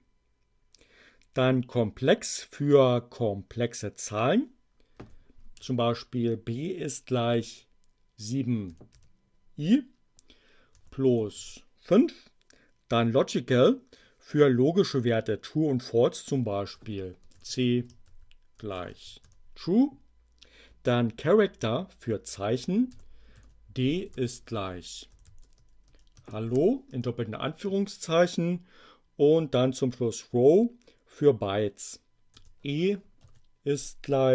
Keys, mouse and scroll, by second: 5.0 b, 5.5 shift+0, 8.5-9.4 typing, 11.0 5, 11.3 Return, 16.7-19.4 typing, 22.9 d, 23.3 shift+0, 24.5-26.5 typing, 26.8 shift+Return, 32.2 e, 33.3 shift+0.